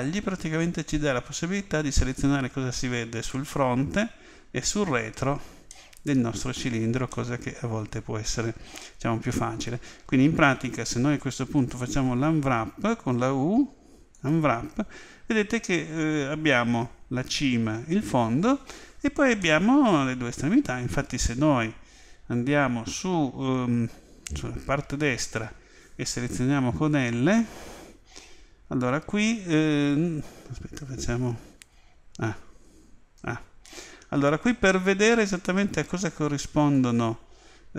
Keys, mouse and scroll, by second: 5.7-9.1 middle drag, 10.4 a, 11.9 u, 19.4-25.2 middle drag, 25.2-30.5 right drag, 31.5 a, 33.2 a, 36.7-37.7 right drag.